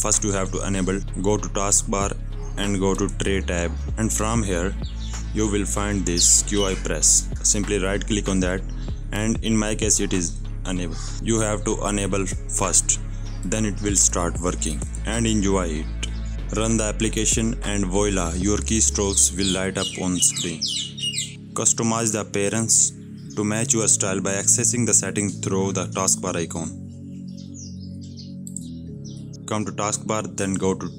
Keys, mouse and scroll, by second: 1.0 click, 2.9 click, 7.3 right click, 14.7 click, 15.9-16.6 typing, 17.2 Up, 17.5 Right, 18.2 Down, 18.4 click, 21.3 alt+scroll down 1, 21.4 click, 23.2 right click, 24.7 click, 28.6 click, 29.8 right click.